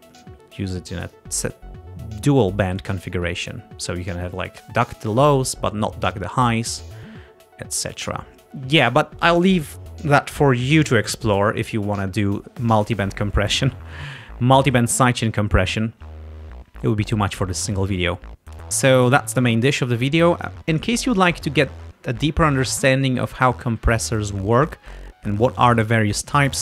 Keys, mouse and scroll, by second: 0.2 click, 1.2-2.7 drag, 18.5-18.8 scroll down 2, 18.9 scroll up 1, 19.5 scroll down 2, 21.5-22.3 scroll up 4, 23.7 scroll down 2, 24.8-25.1 scroll down 2, 25.5 scroll up 2, 26.3 scroll up 2.